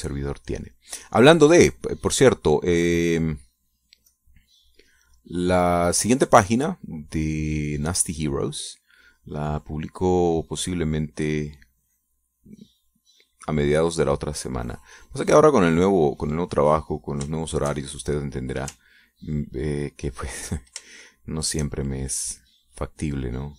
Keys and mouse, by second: 1.6-4.8 drag, 5.0-14.3 drag, 14.4 click, 15.3-16.4 drag, 16.7 click, 18.2 shift+click, 21.1 ctrl+click, 21.9 shift+click, 22.8-23.5 shift+drag.